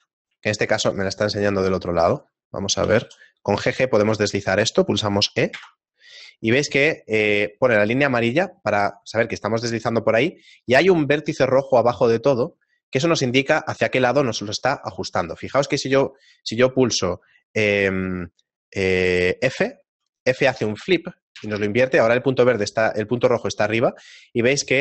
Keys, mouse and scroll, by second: 0.5 shift+middle click, 2.8 g.